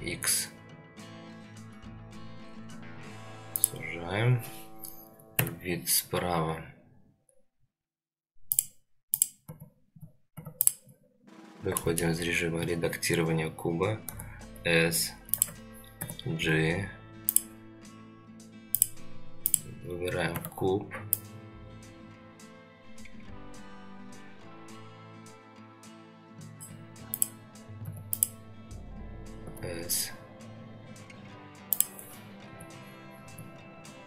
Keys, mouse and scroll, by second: 5.4 KP_3, 8.5 click, 9.2 click, 9.5 Tab, 9.9 Tab, 10.3 Tab, 10.6 click, 11.3-11.7 scroll up 1, 11.8 shift+middle drag, 14.0 s, 15.9 g, 18.7 click, 19.4 click, 20.3 Tab, 21.1-26.7 drag, 27.1 click, 27.9 Tab, 28.1 click, 29.4 s, 32.5 g, 33.2 g.